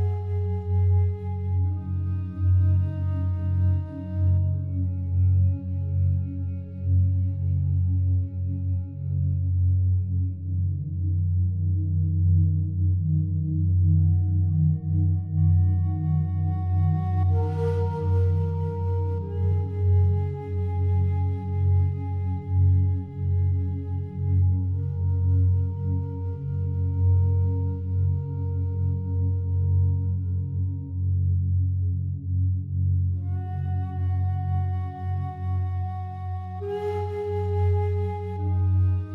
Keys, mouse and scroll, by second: 0.0-0.8 typing, 2.2 Page_Up, 3.6 click, 6.4 ctrl+z, 8.3-12.6 drag, 9.0-10.0 typing, 12.6 1, 14.4 1, 17.2-18.6 drag, 19.0 g, 19.4 z, 21.1 Escape, 21.7 click, 23.4-25.5 drag, 25.8-26.4 typing, 28.3-30.5 drag, 30.5-30.9 typing, 31.8-34.6 drag, 34.6 typing, 34.8 click, 36.2-37.5 typing, 38.9 click.